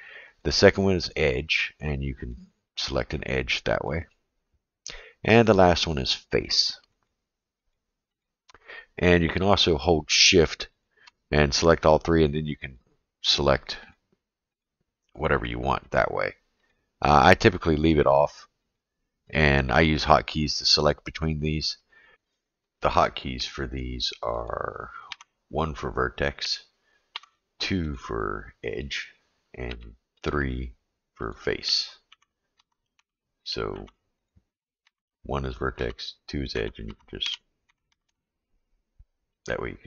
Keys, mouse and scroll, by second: 0.3 click, 1.4 click, 2.2 click, 2.7 click, 3.2 click, 3.8 click, 5.5 click, 6.4 click, 7.0 click, 7.6 click, 8.2 click, 8.5 click, 10.3 shift+click, 10.7 shift+click, 12.0 click, 12.7 click, 13.8 click, 14.5 click, 15.3 click, 15.9 click, 16.6 click, 17.2 click, 17.6 click, 18.2 click, 19.3 click, 20.5 click, 21.0 click, 21.4 drag, 21.8 click, 25.1 1, 27.1 2, 27.9 click, 29.7 3, 30.1 click, 31.2 click, 32.1 1, 32.6 2, 33.0 3, 33.7 1, 34.1 click, 34.8-38.0 typing, 39.4 click.